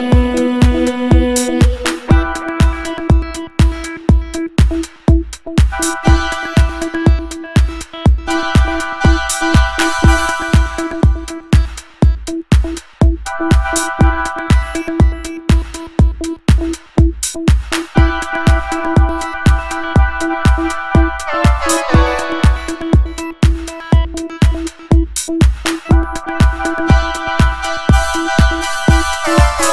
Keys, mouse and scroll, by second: 1.1 click, 1.8 click, 4.1 click, 5.8 ctrl+scroll down 1, 6.5 ctrl+scroll up 1, 7.1 scroll down 1, 8.5 a, 9.6 click, 10.2-10.7 ctrl+scroll down 2, 13.1-13.4 ctrl+scroll up 4, 13.8-14.3 ctrl+scroll down 5, 17.3-17.9 ctrl+scroll up 4, 18.3 scroll down 2, 18.9 ctrl+scroll up 1, 21.2 click, 22.2 double click, 24.4 click, 28.1 click, 29.0 click.